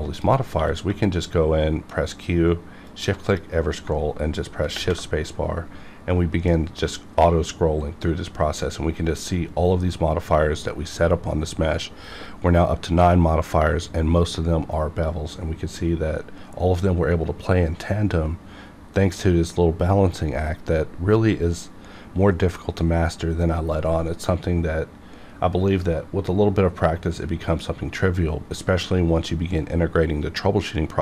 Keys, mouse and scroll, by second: 0.1 click, 0.5 q, 2.9 shift+click.